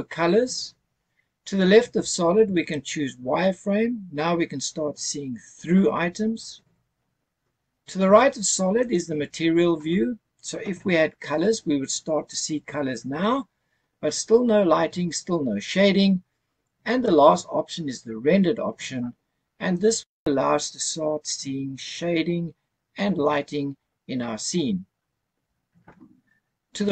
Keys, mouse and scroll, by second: 2.8 click, 3.8-4.4 scroll up 5, 5.0-5.9 scroll down 2, 5.9 scroll up 1, 6.4 scroll down 1, 9.6 click, 20.1 click.